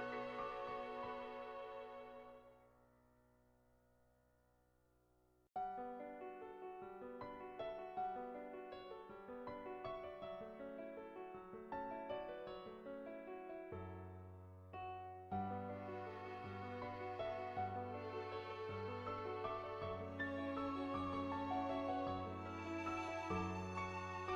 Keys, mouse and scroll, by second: 0.0 middle click, 0.4 middle click, 1.3 shift+middle click, 1.6 shift+middle click, 1.8 middle click, 2.1 shift+middle click, 3.4-5.0 drag, 5.4 ctrl+z, 6.0 click, 6.9-8.2 drag, 8.8 ctrl+z, 9.3-12.3 drag, 13.1 click, 13.1 right click, 13.7 middle click, 14.4 ctrl+z, 14.5 middle click, 14.8 shift+middle click, 15.0 middle click, 16.2-17.3 drag, 17.8-21.4 drag, 22.5-24.1 drag.